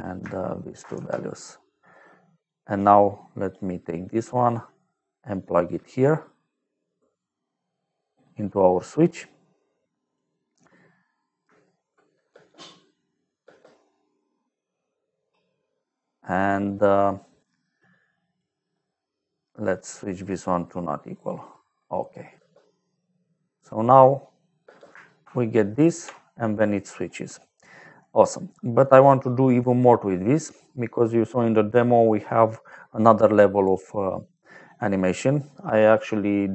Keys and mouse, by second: 0.6 shift+click, 0.8 f, 1.6 click, 2.6 click, 2.9 click, 3.8 middle click, 5.6 click, 12.2 space, 13.3 space, 16.6 middle click, 17.5 click, 20.1 click, 21.0 click, 22.2 space, 24.6 space, 25.1 shift+click, 27.2 middle click, 28.2 middle click, 29.2 click, 30.3 middle click, 32.2 middle click, 33.3 click, 34.4 middle click, 35.7 middle click.